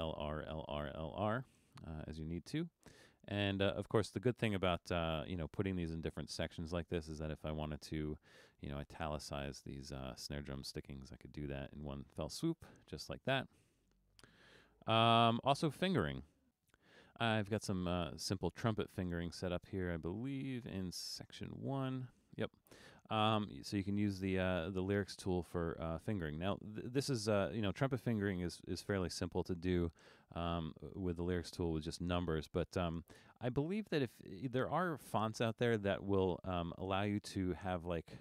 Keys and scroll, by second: 14.0 super+z.